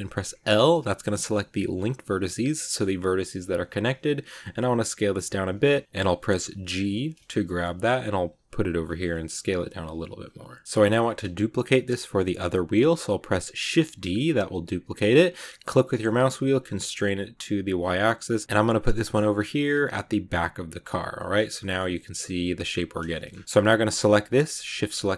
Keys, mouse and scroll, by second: 0.2 l, 2.6 shift+middle click, 2.9 s, 10.8 click, 13.6 shift+d, 20.9 scroll down 1, 21.0-23.2 middle drag, 23.2 scroll up 2, 24.0 right click, 24.8 shift+right click.